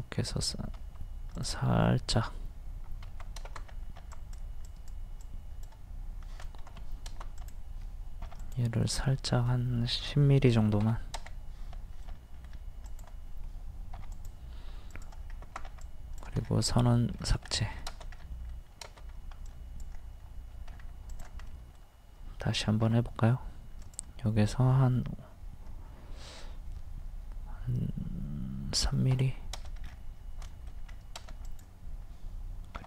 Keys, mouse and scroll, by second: 0.8 Escape, 1.3 click, 3.0 Escape, 4.0 e, 4.1 click, 6.6 ctrl+z, 7.4 click, 8.4 click, 10.5 KP_1, 10.6 KP_0, 12.0 middle click, 12.9 click, 14.0 p, 14.1 click, 15.7 e, 16.4 scroll down 1, 16.9 middle click, 17.2-17.5 scroll down 1, 17.6 shift+middle click, 19.5 click, 20.7-21.1 scroll up 1, 21.1 click, 21.4 scroll up 1, 21.5 middle click, 23.8 click, 28.9 KP_3, 29.8 scroll down 1, 30.9-31.4 scroll up 1, 31.5 click, 32.8 p.